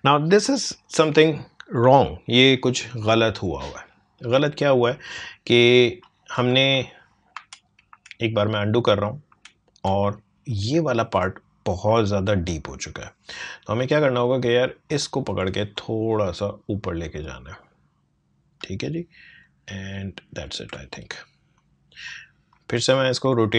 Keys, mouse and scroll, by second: 6.6 ctrl+space, 7.3 ctrl+z, 13.7-19.4 drag, 19.4-23.5 alt+drag.